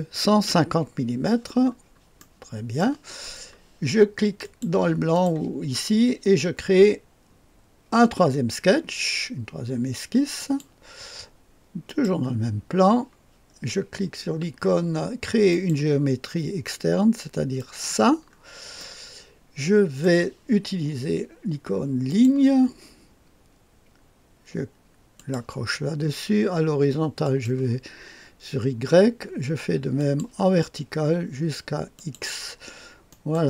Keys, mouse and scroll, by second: 0.1 KP_5, 0.4 KP_0, 1.6-2.2 scroll down 1, 2.2 click, 2.8 right click, 4.4-5.7 drag, 10.4 click, 11.8 click, 15.4 click, 17.5 click, 18.3-18.7 scroll up 1, 18.7-20.4 right drag, 22.0 click, 22.9-28.1 drag, 29.9-32.6 drag, 33.0 right click.